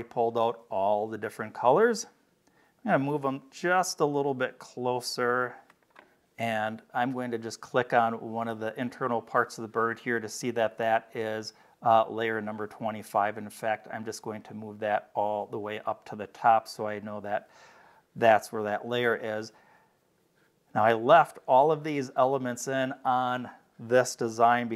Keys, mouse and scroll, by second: 1.7 click, 3.8-5.4 drag, 5.7 click, 7.6 click, 12.6-14.4 drag, 19.1 click, 19.7 scroll down 4.